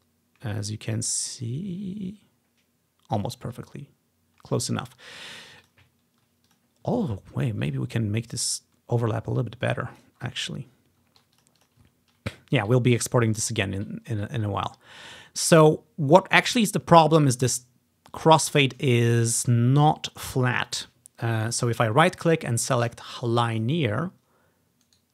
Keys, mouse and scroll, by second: 0.0-0.5 scroll up 2, 4.9-5.7 ctrl+scroll down 2, 5.7-7.2 ctrl+drag, 7.1-7.8 scroll up 1, 8.5-10.1 drag, 10.3-11.1 scroll down 1, 10.5 ctrl+click, 10.9-11.9 ctrl+drag, 11.1 scroll up 1, 12.0 ctrl+click, 12.0-12.3 ctrl+scroll down 2, 12.6 click, 13.0 scroll down 1, 13.6 scroll up 1, 14.0 scroll down 1, 14.4 scroll up 1, 15.0 scroll up 2, 15.5-17.0 drag, 16.1 scroll down 1, 16.3 scroll up 1, 16.3-17.2 scroll down 1, 18.4 click, 19.2 ctrl+click, 21.5-23.6 right drag, 23.6 click, 25.0 right click.